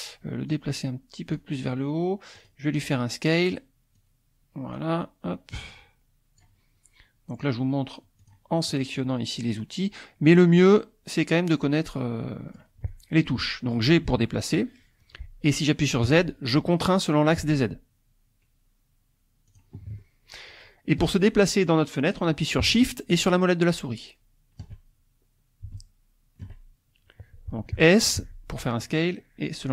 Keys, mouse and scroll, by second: 0.5-1.5 drag, 2.4 click, 4.0-5.0 drag, 5.5-6.6 drag, 8.2 click, 10.6-12.8 drag, 14.1 g, 16.1 z, 19.5 click, 20.0-21.1 shift+middle drag, 23.2-24.8 shift+drag, 25.7-28.7 shift+drag, 28.2 s.